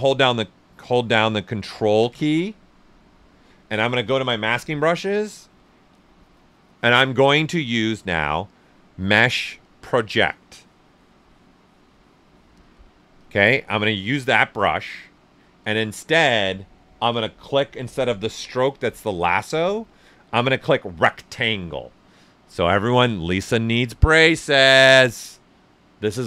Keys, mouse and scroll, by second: 0.6 k, 0.6 right click, 0.7-4.0 right drag, 4.0 ctrl+click, 13.1 ctrl+click, 17.1 ctrl+click, 17.1 typing.